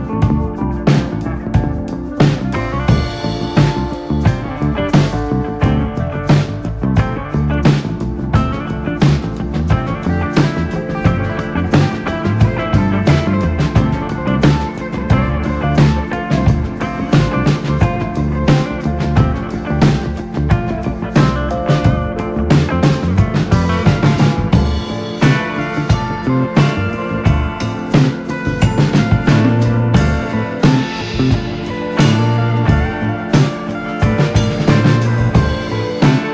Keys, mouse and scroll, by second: 1.3 click, 1.7 g, 4.9 scroll up 2, 5.1 shift+middle click, 5.4 click, 5.9 g, 7.6 click, 7.7 g, 8.5 click, 8.6 g, 9.8 click, 9.9 g, 11.0 shift+middle click, 11.3 click, 11.8 b, 13.1 click, 13.2 g, 14.6 click, 14.7 g, 16.3 click, 16.4 g, 17.3 click, 17.5 g, 18.3 click, 18.4 g, 19.7 click, 19.8 g, 21.4 Tab, 21.6 click, 21.8-22.3 scroll down 4, 22.0 shift+middle drag, 22.3-23.5 middle drag, 23.5 scroll up 3, 23.7-24.2 shift+middle drag, 24.2 click, 25.0-26.0 drag, 27.1 click, 27.5 click, 27.7 Tab, 28.3 KP_1, 28.8 ctrl+r, 33.7 ctrl+r.